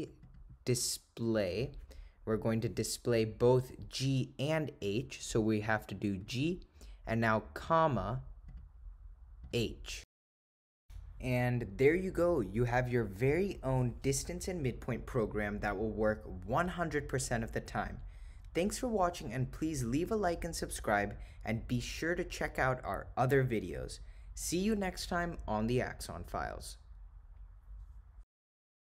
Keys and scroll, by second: 0.0 Down, 0.3 Down, 1.3 Return, 7.7 ,, 9.5 ^.